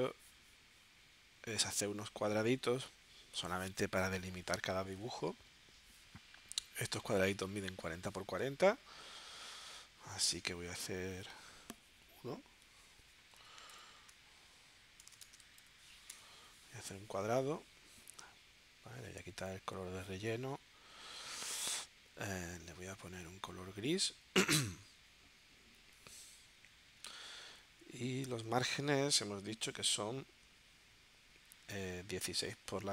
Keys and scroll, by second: 11.1 m, 13.3 4, 15.2 Tab, 16.1 Return, 27.8 super+Tab.